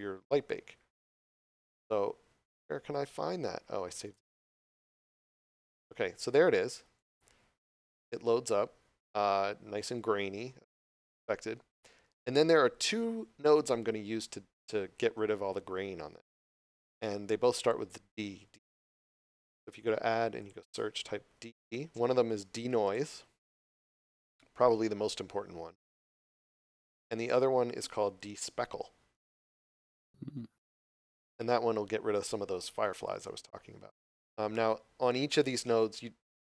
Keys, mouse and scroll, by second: 1.0 click, 19.1 click, 21.3 d, 21.5 e, 22.8 click.